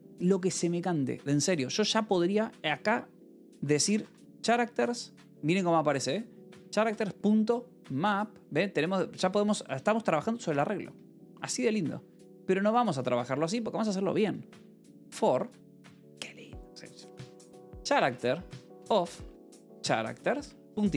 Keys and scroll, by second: 3.5-6.7 typing, 9.0 Escape, 9.2-13.3 typing, 10.8 Escape, 12.1 Escape, 14.6-15.9 typing, 17.1-20.9 typing.